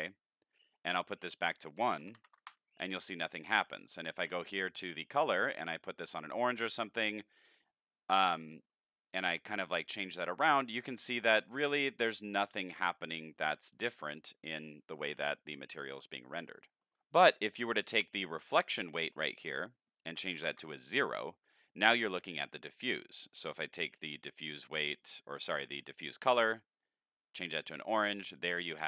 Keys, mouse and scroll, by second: 1.1 click, 4.0 click, 5.5 click, 6.3 click, 8.1 click, 9.1 click, 10.4 click, 11.5 click, 12.2 click, 13.3 click, 19.5 click, 20.5 Return, 23.2 click, 25.1 click, 25.8 click, 26.7 click.